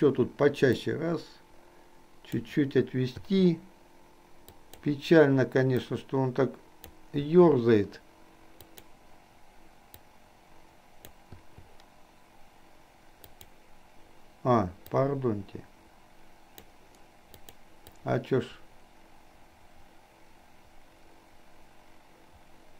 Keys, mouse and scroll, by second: 0.9 click, 1.7 click, 3.3 i, 4.5 click, 6.0-7.0 drag, 8.7 click, 10.3-11.3 drag, 11.4 i, 13.4 click, 15.0-16.9 drag, 17.5 click, 18.0-22.7 drag.